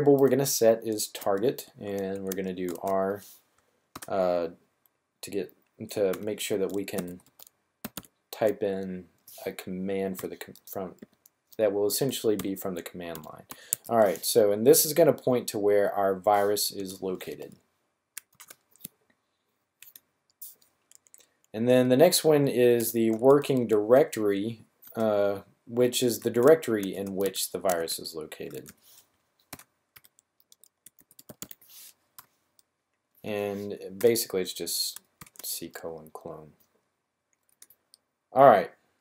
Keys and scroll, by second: 0.0-0.1 typing, 2.0-2.6 typing, 3.8 typing, 5.8-7.9 typing, 9.9-10.9 typing, 12.3-13.6 typing, 16.9 typing, 18.3 typing, 22.3-23.6 typing, 25.6-32.1 typing, 33.9 typing, 34.9 typing.